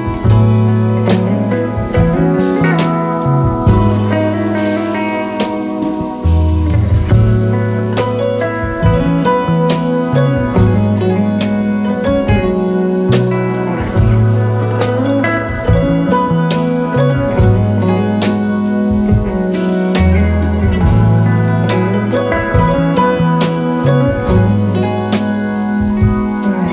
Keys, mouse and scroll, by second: 1.6 alt+Tab.